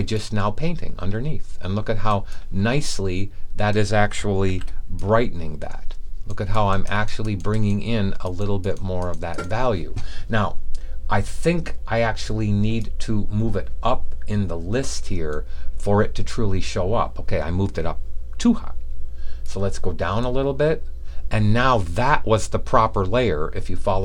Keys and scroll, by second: 4.4 super+d.